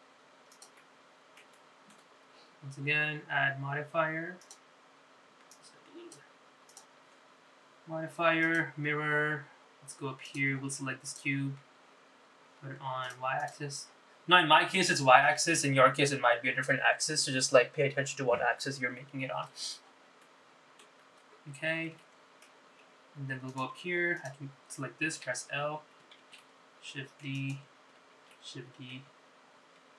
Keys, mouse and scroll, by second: 0.1 g, 1.9 middle click, 2.7 shift+middle click, 5.5 click, 6.7 click, 7.8-9.9 drag, 11.4 click, 14.2 click, 21.3 middle click, 22.1 scroll down 2, 22.7 scroll up 2, 23.1 shift+middle click, 24.6 click, 24.9 Tab, 25.3 click, 26.3 l, 27.3 shift+d, 29.3 shift+d.